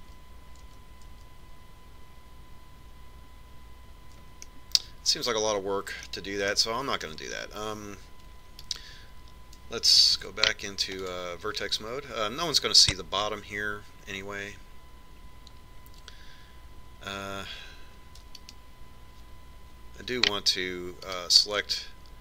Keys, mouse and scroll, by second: 0.3 ctrl+z, 0.7 ctrl+z, 0.9 ctrl+z, 1.2 ctrl+z, 1.5 ctrl+z, 1.8 ctrl+z, 2.4 ctrl+z, 2.8 ctrl+z, 6.2-8.0 middle drag, 8.2-10.1 middle drag, 10.4-12.2 right drag, 11.9 ctrl+Tab, 20.2-22.1 right drag.